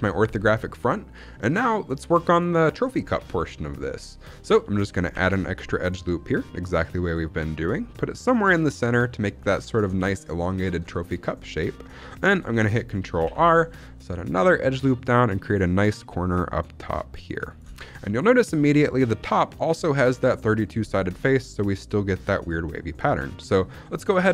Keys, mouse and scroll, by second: 0.3 scroll down 2, 0.6 shift+middle click, 1.1 shift+middle click, 1.5-2.7 scroll up 1, 3.2 scroll down 1, 3.5 shift+middle click, 3.7-4.2 scroll up 2, 4.4 shift+middle click, 5.0 ctrl+r, 9.6 click, 9.9 shift+middle click, 10.8 shift+middle click, 13.1 ctrl+r, 17.4 click, 17.7 shift+middle click, 18.0 middle click, 18.4-20.4 scroll up 1.